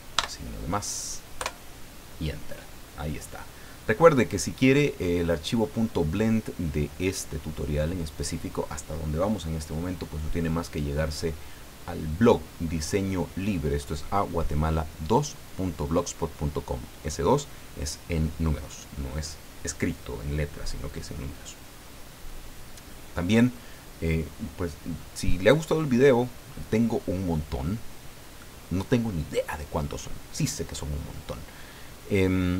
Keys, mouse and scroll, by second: 0.1 KP_Add, 1.3 KP_Enter.